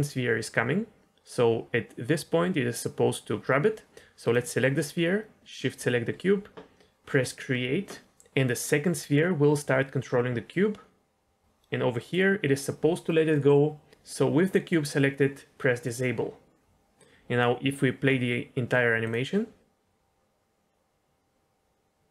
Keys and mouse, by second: 5.6 shift+click, 7.2 click, 8.0-12.1 drag, 15.8 click, 16.9 click, 19.0 click.